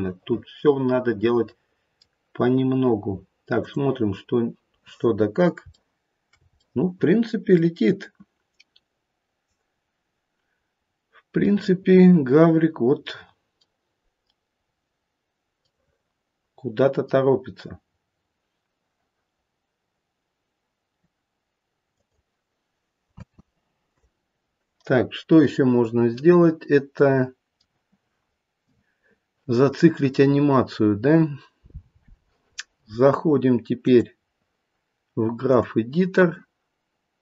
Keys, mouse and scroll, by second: 0.4 middle click, 3.6 click, 4.4-5.1 scroll down 1, 5.1-5.6 scroll down 1, 5.8 shift+middle click, 6.5 scroll up 1, 6.6 middle click, 10.8-11.4 scroll up 1, 11.5 middle click, 11.8 middle click, 13.6 middle click, 14.6 scroll down 1, 15.7 middle click, 21.9 click, 23.1 space, 24.8-25.2 scroll up 1, 25.4 middle click, 26.3 middle click, 30.5-32.1 scroll down 2, 35.6 click.